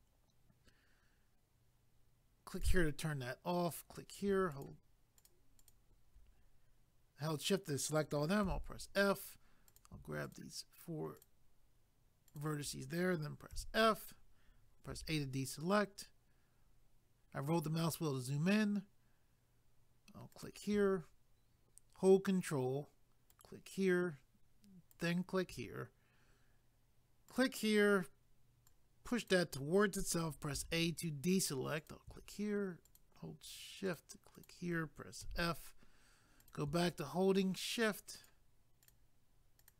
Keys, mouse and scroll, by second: 2.5 click, 3.7 click, 4.6 shift+click, 8.5 f, 9.7 click, 10.3 shift+click, 11.2 shift+click, 12.3 shift+click, 15.0 a, 16.4 scroll up 2, 20.3 click, 23.3 ctrl+right click, 24.9 ctrl+right click, 27.3 click, 28.7 click, 31.7 a, 31.8 click, 32.9 shift+click, 33.9 shift+click, 34.4 shift+click, 34.5 shift+double click, 35.2 f, 36.4 click, 38.2 shift+click, 38.8 shift+click, 39.6 shift+click.